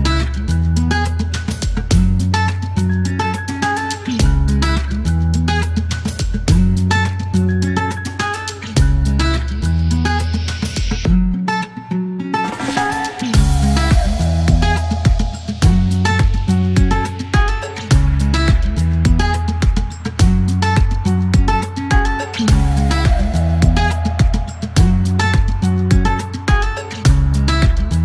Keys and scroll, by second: 9.7 e, 11.6 shift+s, 12.3 p, 15.4 l, 15.9 r, 16.9 F3, 17.1 F4, 17.7 e, 20.0 KP_0, 20.1 Return, 20.5 t, 23.5 alt+e, 25.5 ctrl+z, 26.3 ctrl+a, 26.4 typing.